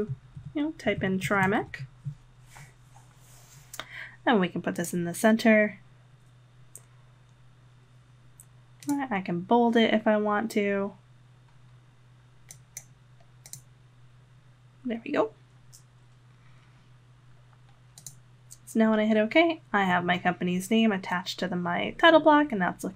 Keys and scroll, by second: 0.1-2.1 typing.